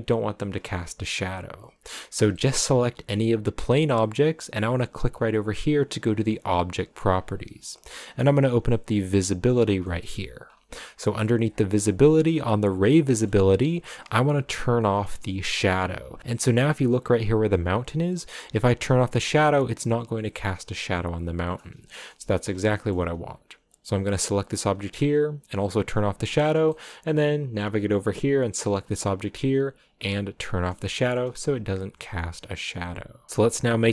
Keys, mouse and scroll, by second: 1.8 right click, 2.4-3.9 shift+middle drag, 3.9-5.8 drag, 9.6 scroll down 1, 9.8 middle click, 10.6-11.5 scroll down 5, 11.9-12.7 scroll down 7, 13.1-15.5 middle drag, 15.5 click, 18.6 click, 20.0 right click, 20.7 click, 21.5 scroll down 3, 21.8 shift+middle click, 22.4 scroll down 1, 22.7-23.8 shift+middle drag, 23.8 right click, 25.6 click, 26.3 scroll down 4, 27.5 shift+middle click, 28.2 right click, 30.0 click, 30.7 middle click, 31.2 a.